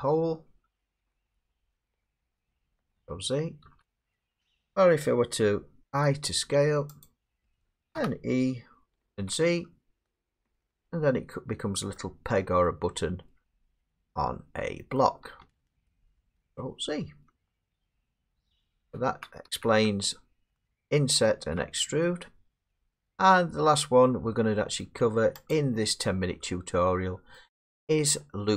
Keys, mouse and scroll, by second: 0.9 middle click, 3.1 ctrl+z, 3.6 ctrl+z, 5.9 i, 7.0 click, 7.9 e, 9.2 z, 10.4 click, 11.9 middle click, 13.5 middle click, 13.8 Tab, 14.9 middle click, 15.4 Tab, 17.7 ctrl+z, 19.0 ctrl+z, 19.5 ctrl+z, 21.3 ctrl+z, 24.0 middle click, 24.8 middle click, 25.5 click, 27.4 middle click.